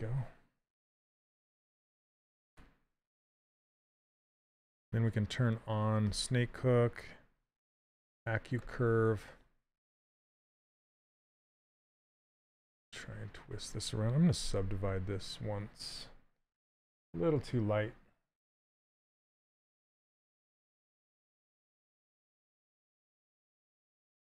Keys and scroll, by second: 14.8 ctrl+d.